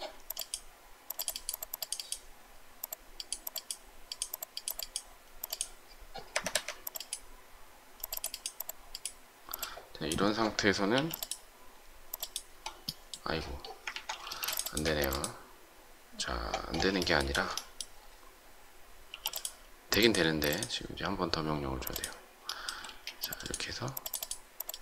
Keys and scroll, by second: 6.3 Escape, 6.4 Escape, 10.8 m, 13.8 ctrl+z, 14.2 space, 14.7 Escape, 19.0 m, 20.2 space, 22.8 shift+space.